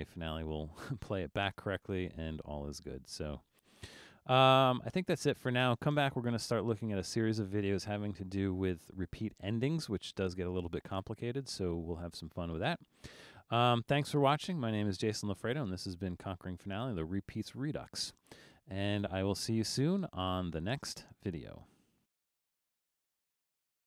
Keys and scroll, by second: 19.5 typing, 22.1 typing.